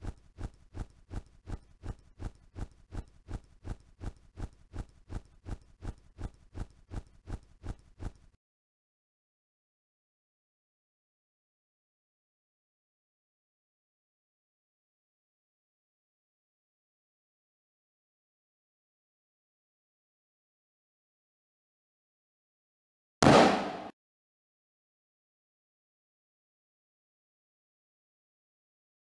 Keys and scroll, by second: 8.2 n, 10.6 w, 11.7 n, 12.9 s, 14.2 n, 16.4 a, 23.1 q, 27.0 o, 28.4 c.